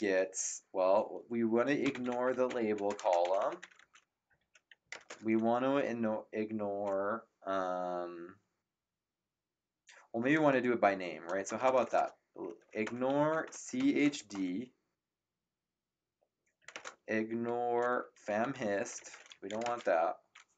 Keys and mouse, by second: 0.0-0.4 typing, 1.6-5.4 typing, 10.5 BackSpace, 12.6-14.6 typing, 16.6-20.0 typing.